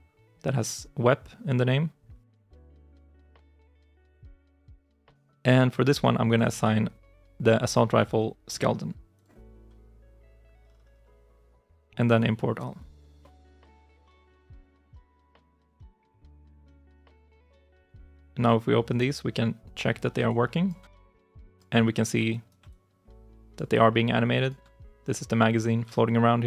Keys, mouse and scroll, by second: 14.3 ctrl+shift+s, 17.0 double click, 20.1 alt+click, 21.2 alt+click, 22.1 right click, 22.5 alt+click, 23.8 alt+click, 25.8 alt+click.